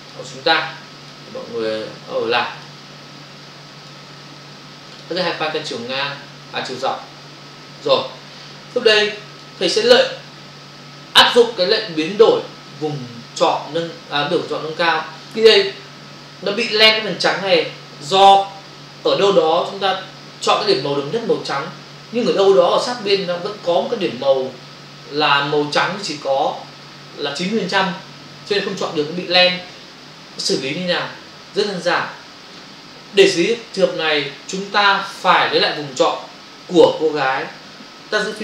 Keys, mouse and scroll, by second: 0.1 click, 2.5 click, 4.2 click, 4.9 click, 6.7 click, 9.3 ctrl+click.